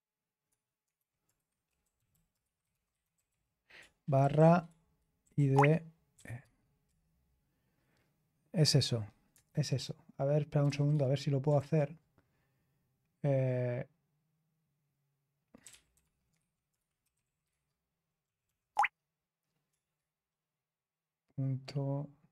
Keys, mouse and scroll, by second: 0.4-1.3 typing, 1.9 alt+f, 2.4-7.3 typing, 9.2-9.9 typing, 10.5 Tab, 10.6 Return, 11.5 super+h, 15.3-19.8 typing.